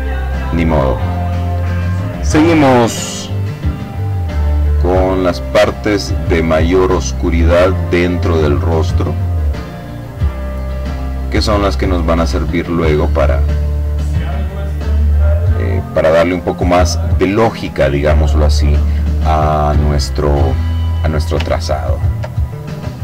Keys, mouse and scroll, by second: 2.5 click, 3.8 click, 4.4 middle click, 4.8 click, 5.8 click, 6.5 click, 7.6 click, 8.4 click, 9.4 click, 11.5 click, 12.7-15.3 drag, 20.0-20.7 ctrl+scroll down 1, 20.7 ctrl+scroll up 1, 20.9-22.0 ctrl+drag, 22.5 click.